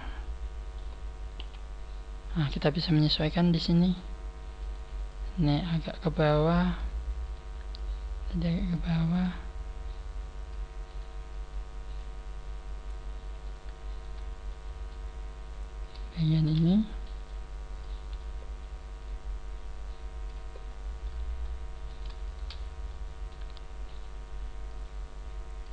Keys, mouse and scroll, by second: 1.3 KP_1, 4.5 right click, 5.0 click, 5.9 click, 7.1 right click, 7.7 click, 9.1 right click, 9.8 click, 10.8 right click, 11.4 click, 13.3 right click, 13.8 shift+right click, 14.4 middle click, 15.1 scroll up 3, 15.7 right click, 16.0 shift+right click, 17.2 middle click, 17.9 middle click, 17.9 KP_1, 18.3 scroll down 3, 18.9 click, 20.5 scroll up 3, 21.0 middle click, 21.2 click, 21.8 middle click, 21.8 right click, 21.8-22.1 scroll up 1, 22.3 shift+right click, 22.8 middle click, 23.8 KP_1, 24.6 click, 24.7 click.